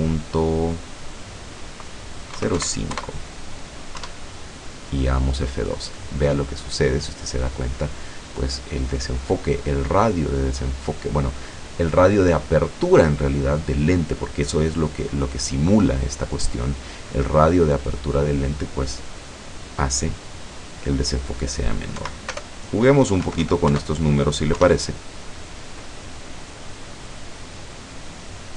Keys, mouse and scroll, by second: 2.3 KP_0, 2.6 KP_5, 2.9 KP_Enter, 4.1 F12, 20.6 click, 22.1 Right, 22.4 BackSpace, 23.3 KP_7, 23.3 KP_5, 23.7 KP_Enter, 24.6 F12.